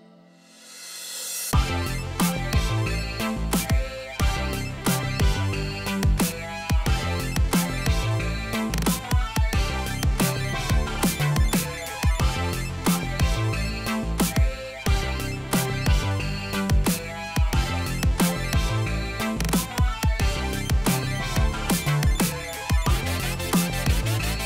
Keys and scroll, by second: 11.0 ctrl+t, 22.6 ctrl+t.